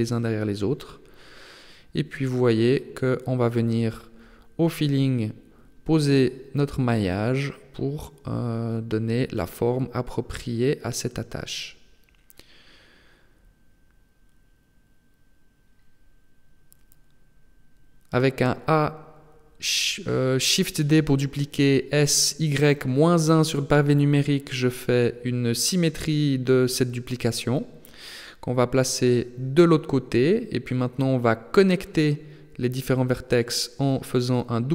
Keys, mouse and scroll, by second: 1.8 b, 3.2 g, 6.0 a, 6.4 b, 8.1 g, 12.6 middle click, 14.4 a, 14.8 b, 16.4 KP_3, 18.0 a, 18.2 a, 19.4 shift+d, 21.1 s, 24.8 g, 31.2 middle click, 33.0 right click, 33.4 shift+right click, 33.9 right click, 34.2 shift+right click, 34.6 middle click.